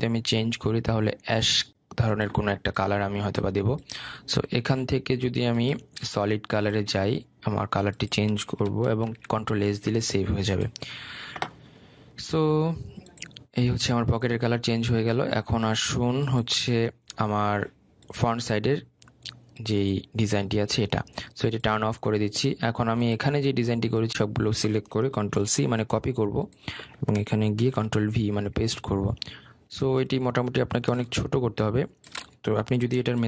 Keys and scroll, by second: 9.9 ctrl+s, 26.4 ctrl+c, 28.6 ctrl+v.